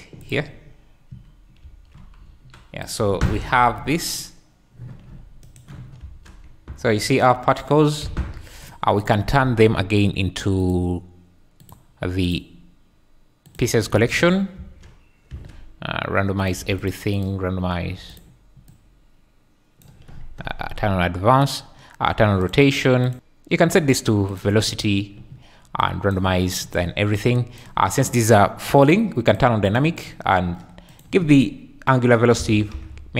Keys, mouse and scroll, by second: 1.6 ctrl+v, 2.2 s, 2.8 click, 2.9 `, 3.5 g, 3.8 z, 4.1 click, 6.0 space, 6.4 `, 8.0 Escape, 9.0 click, 10.7-11.7 drag, 12.3-13.5 drag, 14.6 space, 15.3 space, 16.5 click, 17.3 click, 18.6-19.8 drag, 22.4 click, 23.1-24.4 drag, 25.8 click, 26.6 click, 27.1 click, 30.0 click, 30.9-33.1 drag.